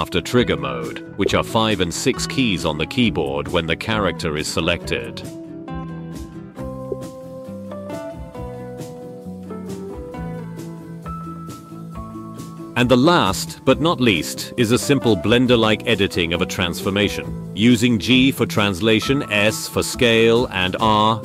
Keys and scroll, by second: 6.8 space, 15.6 r, 16.9 x.